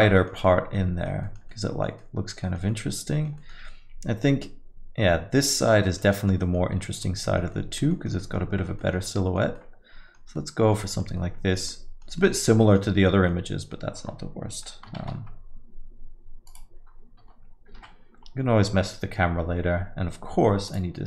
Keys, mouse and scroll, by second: 6.4 right click, 6.5 right click.